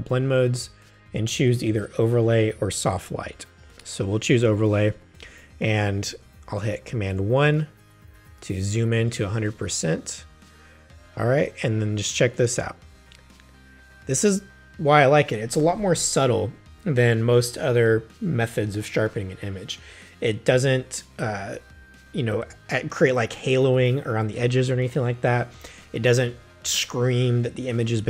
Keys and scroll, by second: 7.1 super+i, 9.0 super+space.